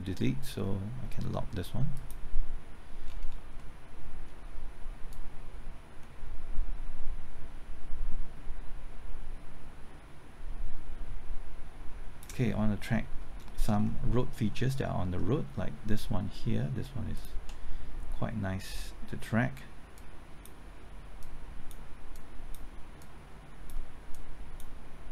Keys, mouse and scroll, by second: 3.0-3.6 scroll down 1, 3.6 middle click, 5.1-12.2 drag, 13.1-13.4 scroll up 1, 13.4 middle click, 13.8-14.2 scroll up 1, 14.2 middle click, 17.1 ctrl+click, 19.9-22.1 drag, 22.1 click, 23.0 click, 24.1-25.1 drag.